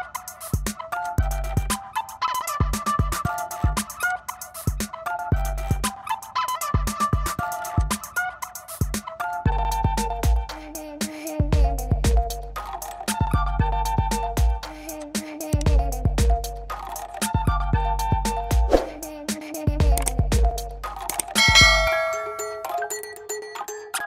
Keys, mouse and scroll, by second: 1.1 click, 3.6 click, 13.4-16.6 drag, 17.4 click, 18.3 click, 19.9 middle click, 19.9 middle click.